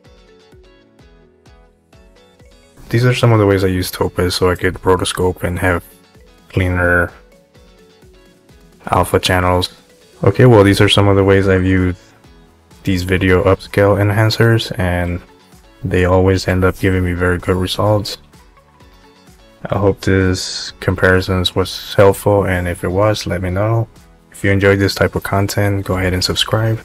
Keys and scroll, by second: 16.4 Home.